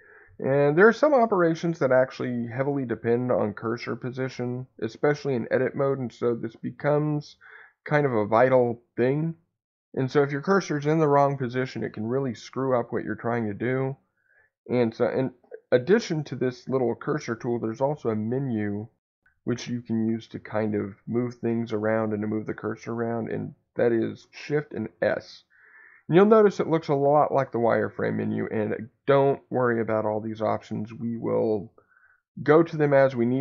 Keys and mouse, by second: 2.9 click, 3.5 click, 24.9 shift+s.